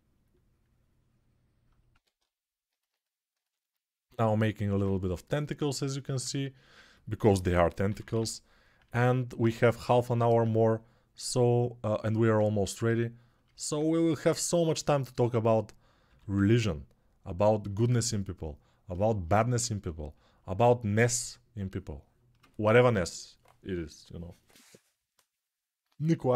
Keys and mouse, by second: 1.7 1, 7.3 6, 7.6 ], 7.8 ], 7.9 ], 15.8 g.